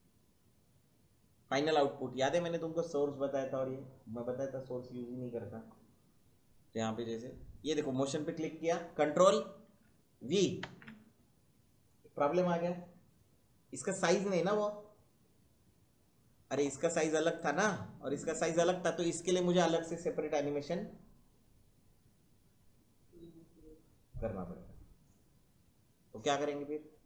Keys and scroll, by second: 10.5 ctrl+v.